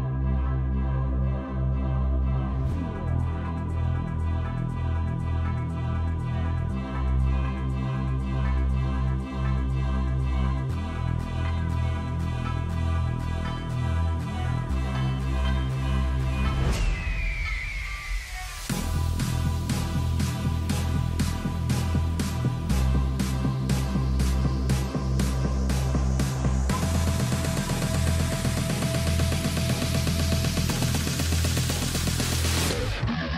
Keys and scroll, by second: 1.1 Escape, 3.5 e, 8.3-10.3 typing, 22.7-24.0 typing, 29.1-31.2 typing, 32.5 z.